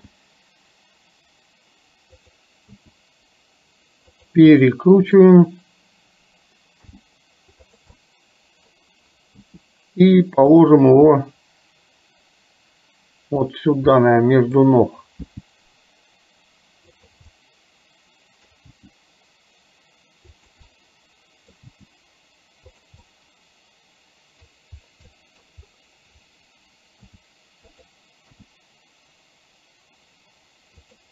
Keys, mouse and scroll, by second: 0.0 g, 2.8 r, 4.7 middle click, 7.0 g, 8.1 middle click, 8.1-8.7 scroll up 1, 9.5 r, 11.2-13.5 middle drag, 13.5-14.1 scroll down 1, 14.1 middle click, 15.3 g, 17.6 middle click, 18.8 g, 20.7 scroll up 1, 21.0 middle click, 21.7 g, 23.1-24.5 middle drag, 25.2 middle click, 27.2 r, 28.5 g.